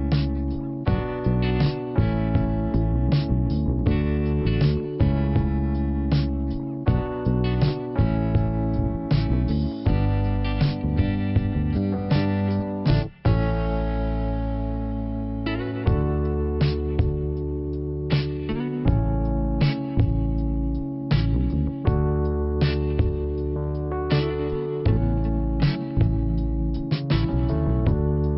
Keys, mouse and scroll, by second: 0.8 click, 1.2 click, 1.3 double click, 1.8 double click, 2.0 double click, 2.1 double click, 3.9 click, 7.6 click, 9.0 click, 10.3 click, 13.0 click, 16.0 click, 21.4 click, 24.3 click, 25.6 click, 27.2 click.